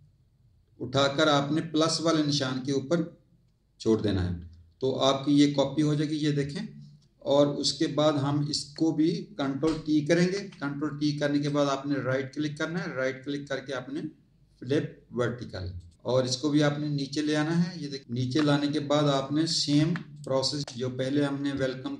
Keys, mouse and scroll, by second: 5.8 click, 10.2 ctrl+t, 11.3 right click, 15.8 click, 16.3 click, 18.2 z, 19.0 click, 19.8 z, 20.1 click, 20.6 click.